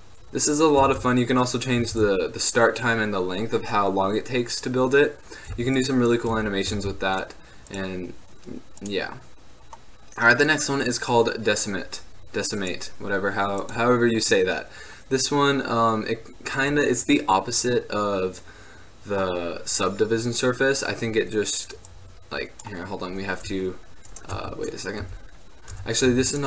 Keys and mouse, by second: 2.1 alt+a, 5.7 x, 6.9 shift+a, 12.7-19.3 drag, 22.0-23.6 drag, 23.6 w, 24.5 Tab, 25.1 a, 25.9 Tab, 26.2 x.